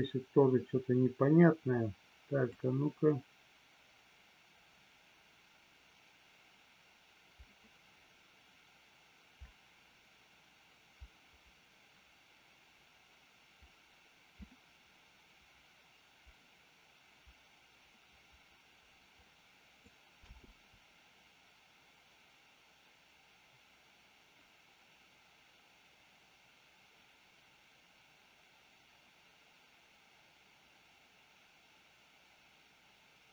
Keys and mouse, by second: 2.4-20.0 drag, 20.2 space.